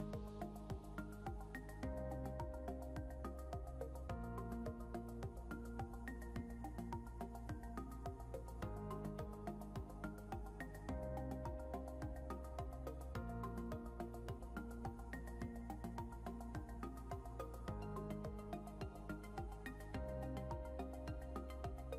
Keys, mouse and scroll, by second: 0.5 Left, 9.6 click, 10.1-10.5 scroll up 1, 12.3 click, 20.1-21.3 scroll up 1.